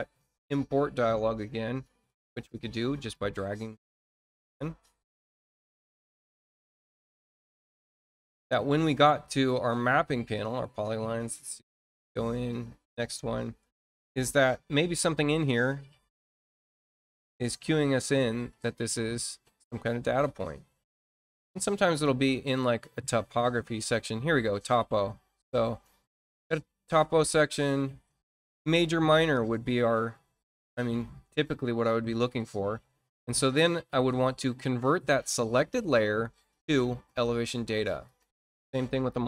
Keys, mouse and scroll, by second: 2.9 click, 4.2-6.8 drag, 8.6 click, 10.3 click, 11.4 click, 13.7-14.0 scroll down 1, 14.4-21.6 scroll down 32, 22.5-23.8 drag, 24.5-25.1 scroll up 4, 25.7 scroll up 2, 25.9-26.5 scroll down 4, 26.9 scroll down 2, 27.5 scroll down 2, 29.0 click, 31.5 scroll down 2, 32.5 scroll up 2, 35.1 click, 37.0 click, 38.0 click, 38.9 click.